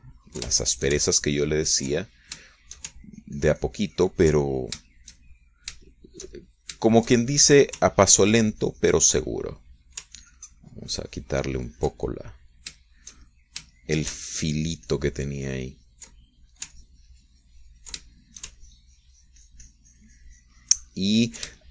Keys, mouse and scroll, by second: 1.9 ctrl+shift+middle click, 2.7-3.7 ctrl+drag, 3.7 ctrl+shift+middle click, 4.4-7.1 ctrl+shift+drag, 7.2-9.0 ctrl+shift+middle drag, 9.3-10.6 ctrl+shift+drag, 10.6 ctrl+middle click, 11.5-13.7 ctrl+drag, 13.7-16.0 middle drag, 16.0-18.0 ctrl+shift+drag, 18.1-19.5 ctrl+drag, 19.5-21.7 ctrl+shift+middle drag.